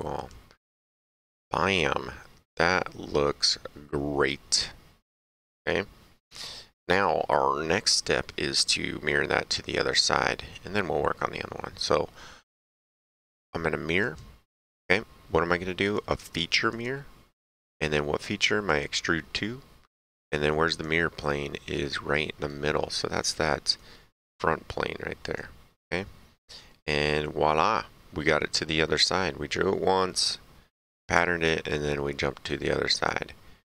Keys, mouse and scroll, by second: 1.3 click, 2.3 middle click, 2.6 right click, 14.0 click, 15.8 click, 18.6 click, 20.7 click, 21.4 right click, 22.7 middle click, 23.1 right click, 25.2 click, 26.3 middle click, 26.8 right click, 32.9 click.